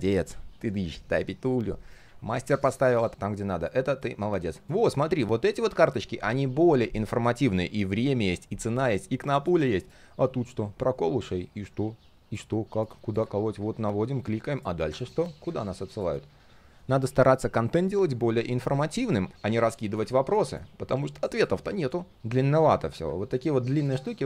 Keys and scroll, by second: 2.0 ctrl+z, 5.6 ctrl+z.